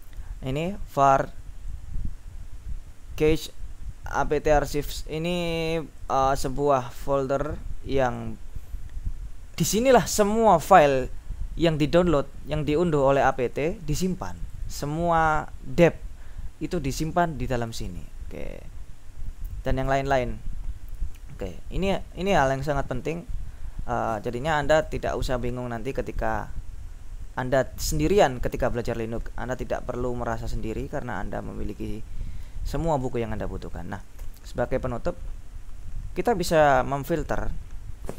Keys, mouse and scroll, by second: 1.8-6.2 drag, 6.3 click, 7.2-8.9 drag, 13.3 click, 14.5 click, 16.9 click, 17.7 click, 18.5-19.3 scroll down 4, 20.6-24.3 scroll up 4, 24.9 q, 26.2 click, 34.2 ctrl+l.